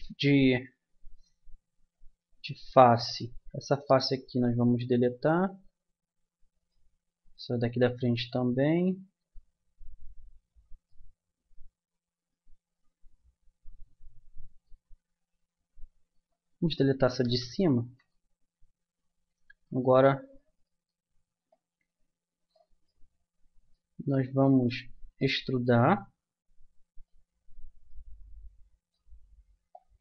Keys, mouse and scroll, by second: 2.0-3.8 right drag, 3.9 Delete, 5.0 Down, 6.6-8.2 drag, 8.3 Delete, 11.4-12.8 middle drag, 16.1-17.8 right drag, 17.2 Delete, 19.6-21.5 right drag, 21.5-23.2 middle drag, 25.4 middle click, 27.4 middle click.